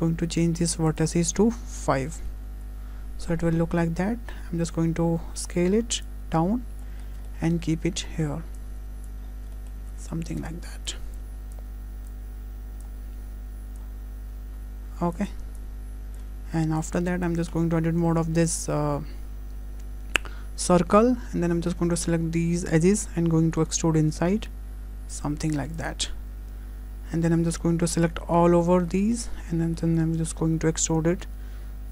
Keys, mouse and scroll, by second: 4.5-5.5 scroll down 3, 4.8 s, 6.1 click, 7.0-8.0 scroll up 7, 7.3 shift+middle click, 8.6 click, 9.3 scroll up 2, 9.6 shift+middle click, 9.9 s, 10.9 click, 11.6 click, 13.8 click, 14.6 s, 15.6 click, 16.8 click, 17.5 Tab, 22.0 2, 23.5 e, 26.2-27.3 scroll down 2, 28.1 a, 28.6 3, 28.9 middle click, 29.6 middle click, 30.5 e.